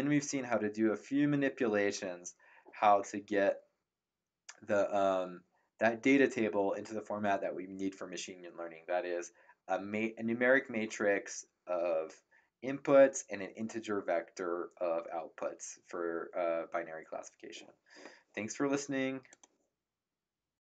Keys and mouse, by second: 19.2 click.